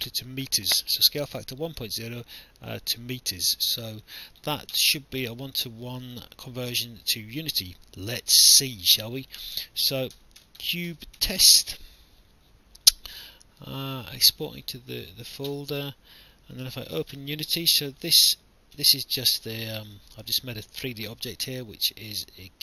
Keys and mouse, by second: 4.0 click, 9.3 click, 9.9-12.2 typing, 14.3 click, 16.6 click, 18.8 Delete, 19.9 click.